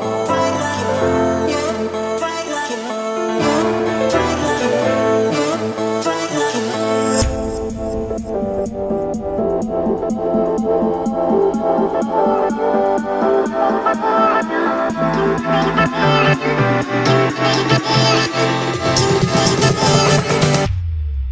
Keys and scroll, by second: 2.2 Escape, 10.2 Escape, 10.9 Escape, 15.2 6, 15.7 Return, 19.2 Escape.